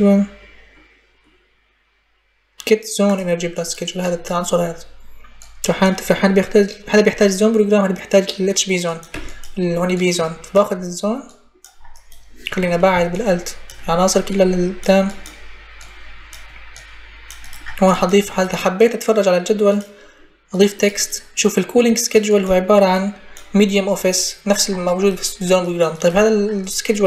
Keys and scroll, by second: 8.9 Delete.